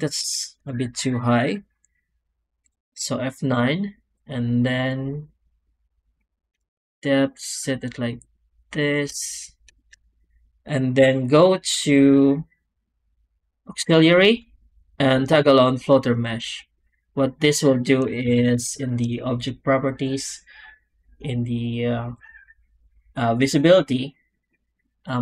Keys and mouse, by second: 0.2 shift+middle drag, 2.5 F9, 10.9 F9, 18.1 ctrl+space, 19.9 click, 22.1 click, 22.7 click, 23.3 click.